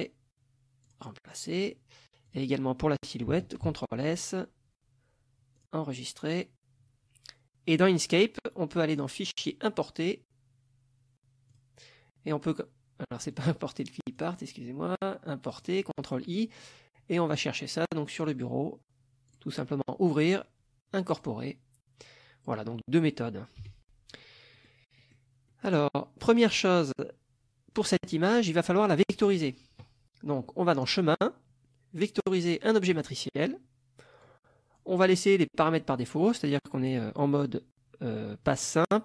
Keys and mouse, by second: 0.9 click, 2.3 click, 3.7 ctrl+s, 5.6 click, 7.7 click, 9.3 click, 11.5 click, 13.3 click, 14.1 click, 15.5 click, 17.3 click, 18.2 click, 19.3 click, 21.2 click, 22.0-22.7 drag, 23.6 Delete, 24.6 middle click, 25.0 middle click, 25.5-26.0 middle drag, 26.4 click, 30.8 click, 33.0 click, 34.3 click.